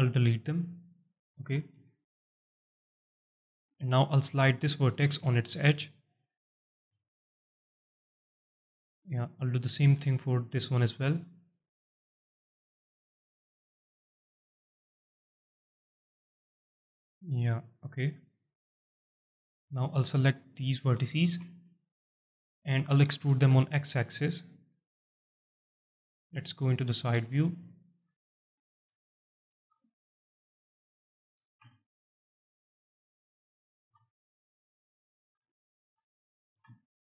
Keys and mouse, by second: 1.1 alt+click, 1.7 1, 2.1 alt+click, 2.9 click, 3.6 alt+shift+click, 4.9 g, 5.1 g, 5.2 g, 6.9 g, 8.4 click, 9.9 g, 10.1 g, 18.6 click, 19.2 alt+click, 20.1 click, 21.0 ctrl+click, 21.7 alt+click, 22.3 alt+shift+click, 23.5 e, 23.8 x, 25.5 click, 26.2 KP_1, 26.9 z, 27.7 shift+middle click, 27.7 alt+shift+click, 28.5 shift+middle click, 29.5 g, 31.0 shift+click, 31.4 r, 33.0 shift+click, 33.8 g, 34.9 shift+click, 35.4 alt+shift+middle click, 36.5 r.